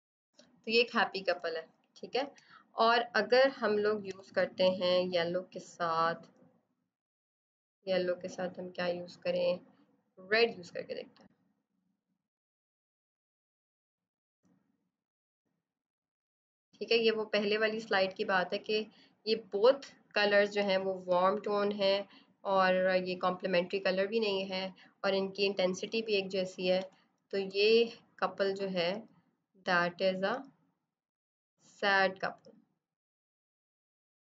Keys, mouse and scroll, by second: 1.3 space, 1.6 click, 1.8 space, 4.0 b, 4.9 alt+click, 5.6 click, 10.2 click, 21.0 click, 26.7 b, 27.2 space, 29.5 click.